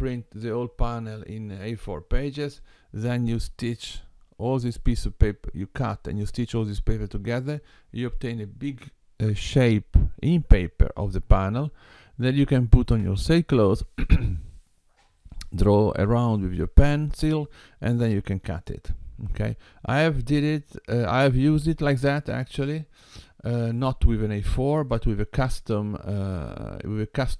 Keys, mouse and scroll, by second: 24.7 click.